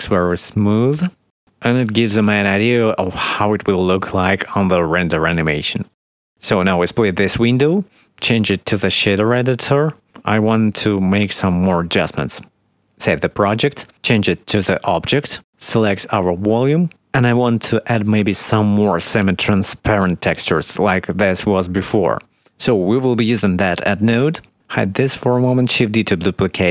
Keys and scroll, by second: 2.1 space, 13.1 ctrl+s, 26.6 shift+d.